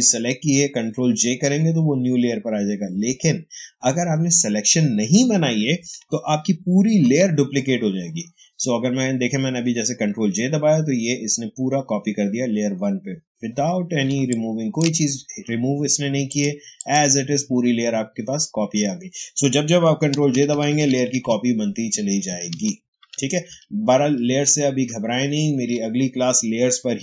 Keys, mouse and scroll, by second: 6.8 ctrl+j, 14.0 ctrl+space, 14.2 ctrl+click, 14.5 ctrl+space, 15.2 space, 16.2 click, 19.4 click, 20.0 ctrl+j, 21.9 ctrl+z, 22.9 ctrl+alt+z.